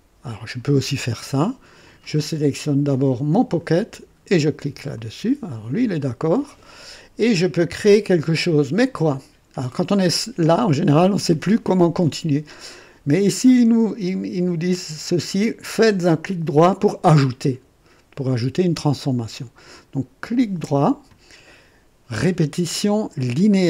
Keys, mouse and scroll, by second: 0.2 click, 3.2 click, 4.9 click, 20.2 right click, 23.4 click.